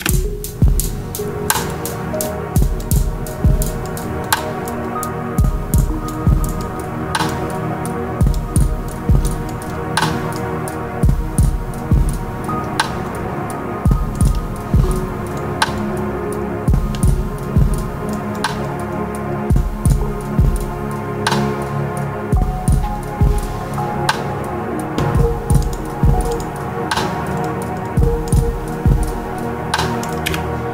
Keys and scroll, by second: 0.7 space, 30.2 space.